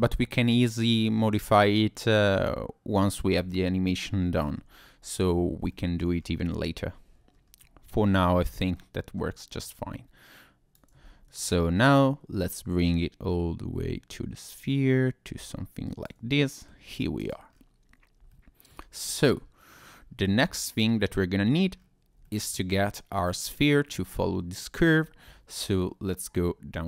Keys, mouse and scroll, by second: 0.6-1.5 scroll down 2, 3.2 g, 4.3 click, 4.8-5.6 scroll down 1, 5.7 shift+middle click, 6.2 scroll up 2, 6.6-7.3 scroll down 1, 7.3-7.7 scroll down 2, 8.2-8.7 scroll up 1, 8.7 middle click, 9.8 Tab, 10.6 click, 11.0 ctrl+z, 12.4 click, 16.3 middle click, 17.0 scroll down 1, 17.2 click, 17.5-17.8 scroll up 2, 18.3 shift+middle click, 19.0 middle click, 20.0-20.6 scroll down 1, 21.0 middle click, 21.8-22.2 scroll up 1, 22.2 shift+middle click, 23.2 click, 23.5-23.8 scroll down 2.